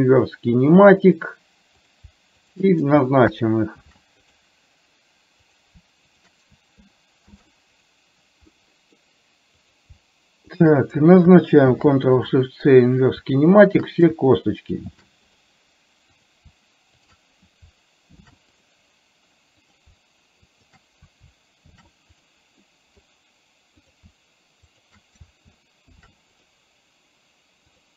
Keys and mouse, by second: 0.0 ctrl+shift+c, 2.6 shift+click, 5.5 click, 6.2 shift+click, 7.3 ctrl+shift+c, 8.6 middle click, 9.7 click, 10.7 shift+click, 11.7 ctrl+shift+c, 13.8 shift+click, 15.0 ctrl+shift+c, 16.2 click, 17.1 shift+click, 18.1 ctrl+shift+c, 20.7 click, 21.7 ctrl+shift+c, 22.7 middle click, 23.8 click, 24.8 shift+click, 27.7 click.